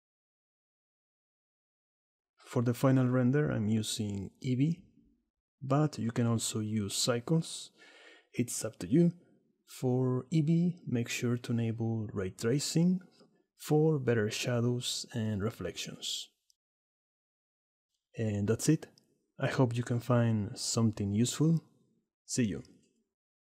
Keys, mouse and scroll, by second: 0.4-1.3 middle drag, 1.5 middle click, 1.7 click, 1.8 middle click, 2.6 click, 3.8 drag, 4.4 shift+middle click, 6.7 click, 8.5-11.1 drag, 14.7 middle click, 16.7 click, 17.5 middle click, 17.7 click, 19.4 click, 19.4 middle click, 19.4 right click, 20.0 middle click, 20.2-22.2 drag, 20.4 middle click, 20.4 right click, 22.2 middle click.